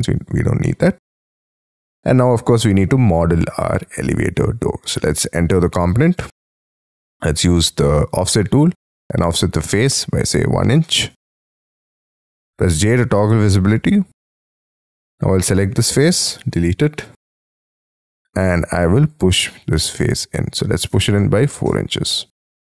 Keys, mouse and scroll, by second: 0.0 Delete, 0.7 middle click, 2.4-5.1 scroll up 5, 5.1 double click, 6.8 f, 10.2 1, 11.0 shift+', 11.3 Return, 11.8 space, 12.6 j, 13.5 middle click, 15.8 Delete, 17.3-18.3 scroll up 17, 18.3 p, 20.9 4, 21.4 shift+', 21.6 Return.